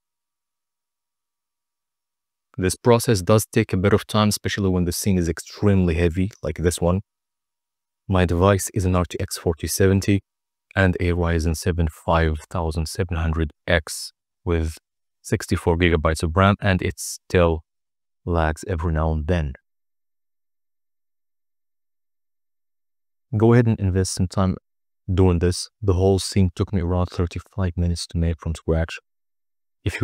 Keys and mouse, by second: 9.8 middle click, 10.1 click, 10.1 right click, 12.1 click, 16.1 z, 19.4 click, 21.3 click, 21.7 click, 22.8 click, 23.6 click, 24.3 click, 24.4 click, 24.8 click, 25.4 click, 25.8 click, 26.7 click, 28.4 KP_0, 29.0 click.